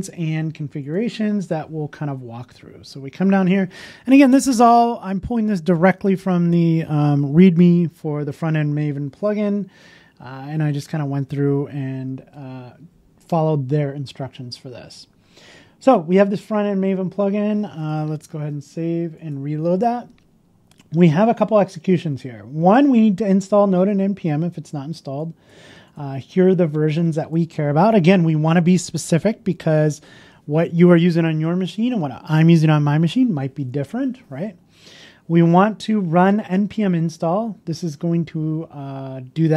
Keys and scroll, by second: 0.0 super+c, 12.2 super+v, 18.3 super+s, 18.4 super+s, 19.4 shift+super+i.